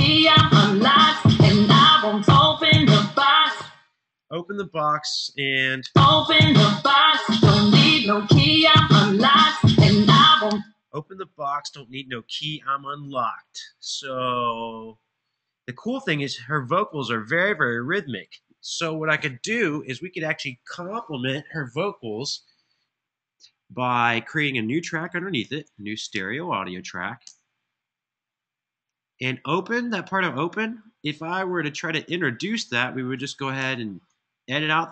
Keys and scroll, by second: 3.2 space, 5.5 space, 10.2 space, 25.1 shift+super+n, 26.2 super+Right, 27.0 Return, 31.6 Left, 33.4 super+e.